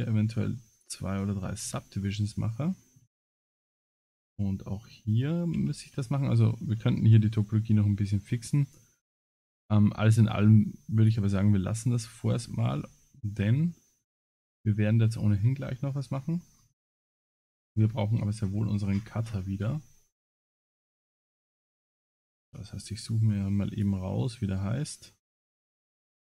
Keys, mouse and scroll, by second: 1.7 Tab, 2.4 middle click, 3.1 Tab, 3.4 middle click, 4.1 ctrl+r, 6.8 Tab, 7.2 middle click, 10.0-10.5 scroll down 9, 11.0 click, 11.0 scroll down 1, 11.4 middle click, 12.1-12.7 scroll up 11, 12.7 Tab, 13.3 Tab, 14.1 middle click, 16.5-17.0 scroll up 8, 17.5-18.0 scroll up 21, 18.9 scroll down 1, 19.0-19.4 scroll down 20, 19.9 scroll down 11, 20.8 click, 21.0 click, 22.4 alt+h, 23.7 click.